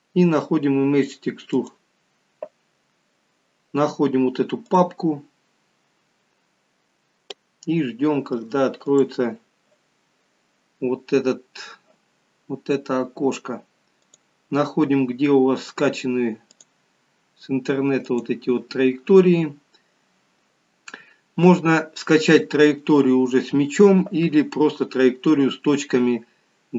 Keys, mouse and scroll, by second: 7.1 click, 9.0 click, 11.5 click.